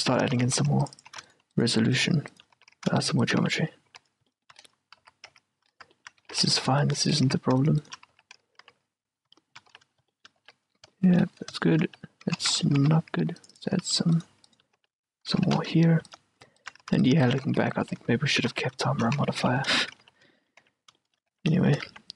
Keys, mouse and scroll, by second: 0.0-1.2 typing, 0.6 ctrl+r, 1.4-4.4 right drag, 2.7 f, 2.8 a, 3.5 f, 4.0 f, 4.4-7.4 middle drag, 5.1-8.8 typing, 7.4-9.5 right drag, 9.5-13.6 middle drag, 9.9 f, 10.6 f, 12.0 f, 12.6 ctrl+z, 13.0 ctrl+r, 13.9 a, 14.3-18.4 right drag, 14.9 f, 15.6 ctrl+z, 17.0-22.1 typing, 18.4 middle click, 18.7 right click, 19.3 middle click, 20.5-22.1 middle drag.